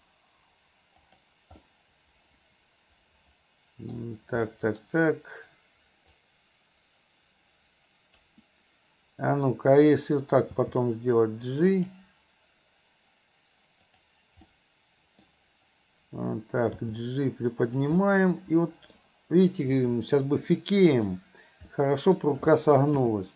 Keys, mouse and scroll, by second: 1.7-3.9 middle drag, 4.5 scroll up 1, 4.6 middle drag, 4.8-6.2 scroll down 1, 6.2-8.4 drag, 10.5 g, 13.9 click, 14.5-15.3 middle drag, 16.9 g, 18.0 middle click, 18.9 scroll down 1, 19.9 scroll up 1, 19.9 middle click, 20.2-20.9 scroll down 1, 20.9 click, 21.7-22.2 middle drag.